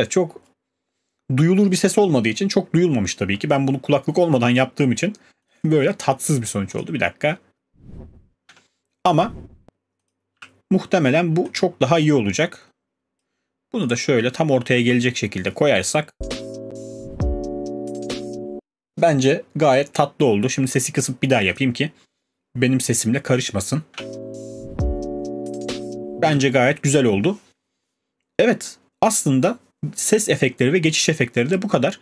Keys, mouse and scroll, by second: 5.5 click, 5.7 click, 6.8 click, 7.5 space, 8.5 space, 9.3 click, 10.1 click, 10.4 q, 13.1 click, 13.9 click, 14.2 alt+scroll, 16.1 click, 16.1 space, 18.5 space, 21.6 click.